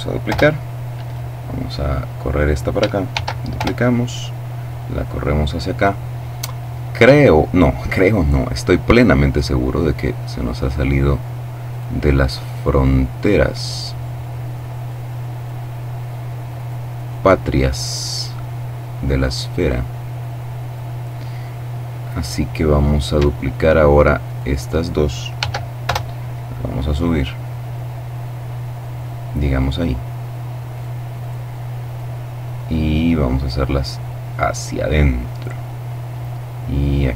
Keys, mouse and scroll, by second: 0.4-2.2 drag, 2.4-3.4 shift+middle drag, 2.4 shift+d, 2.9 shift+Return, 3.4-5.6 drag, 8.6 right click, 9.4 click, 11.0 right click, 11.8 right click, 12.8 click, 15.9 right click, 17.6-20.6 drag, 23.5 shift+right click, 24.7 d, 25.1 Return, 26.5-29.3 drag, 30.0 right click, 31.1 right click, 31.8-34.3 drag, 34.5 right click, 35.2-37.1 drag.